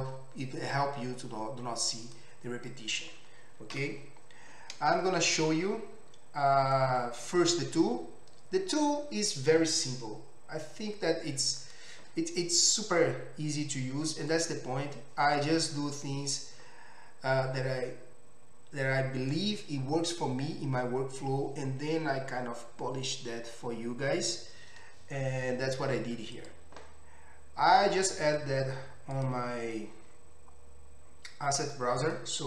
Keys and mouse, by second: 3.7 Delete.